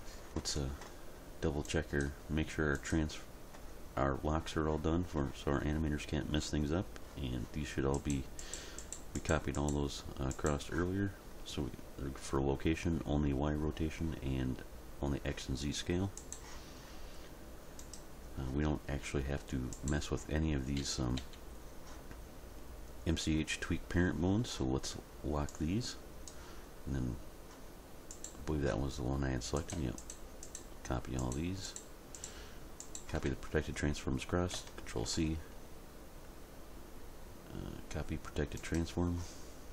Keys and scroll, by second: 20.8 a, 35.0 ctrl+c.